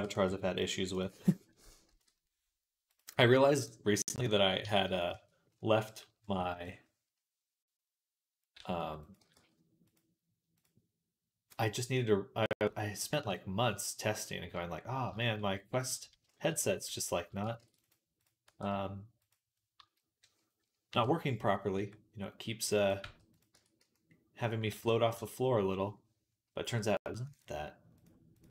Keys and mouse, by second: 1.5 ctrl+l, 1.8 p, 3.0 Tab, 4.1 click, 4.5 Tab, 4.5-10.4 middle drag, 6.2 a, 6.3 ctrl+KP_1, 8.4 s, 9.0 g, 10.4 click, 10.5-12.4 middle drag, 12.4-17.8 drag, 17.4 ctrl+r, 17.8 middle click, 18.0 click, 18.1-21.4 middle drag, 18.3 e, 19.6 a, 20.7 KP_3, 21.4-23.9 drag, 21.6 r, 22.9 g, 23.4 Tab, 23.6 z, 23.9-27.2 middle drag, 24.6 ctrl+s, 25.0 Tab, 27.2-28.5 drag.